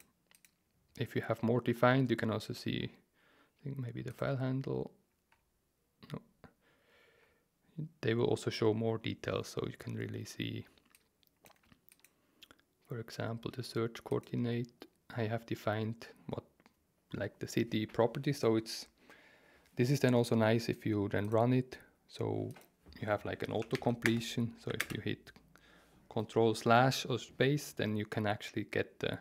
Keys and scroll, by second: 23.7 shift+Home, 24.0 BackSpace, 24.8 ctrl+space.